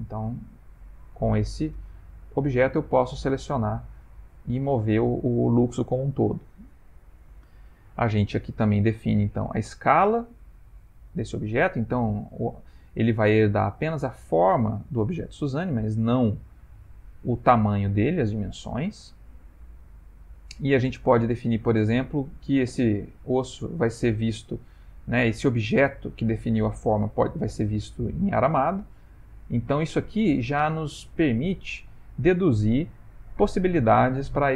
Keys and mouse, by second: 2.0 g, 8.9 click, 21.2 click, 22.3 middle click, 27.1 middle click, 29.8 middle click, 30.1 middle click, 30.1 middle click, 31.8 middle click.